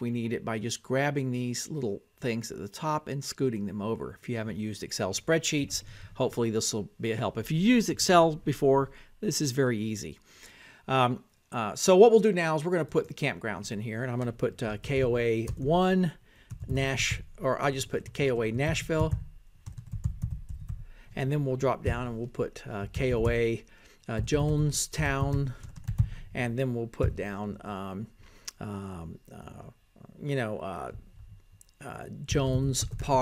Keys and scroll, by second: 14.7-18.4 typing, 20.6-30.8 typing, 31.6 Down.